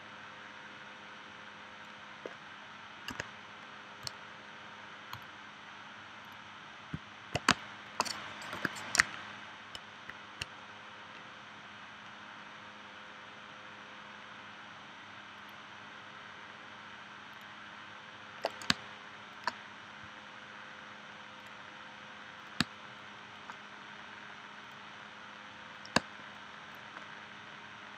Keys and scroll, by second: 3.1 a, 7.5 space, 8.5 p, 18.7 space, 22.6 space, 26.0 space.